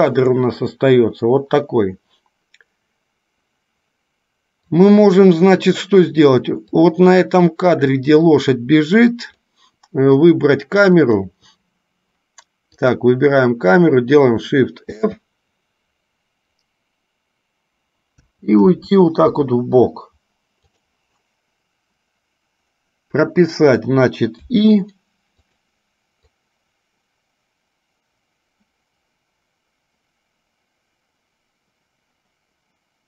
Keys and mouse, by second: 4.8 click, 7.0-9.6 drag, 10.3 click, 11.1 click, 12.8 click, 25.7 click, 26.7-33.0 drag.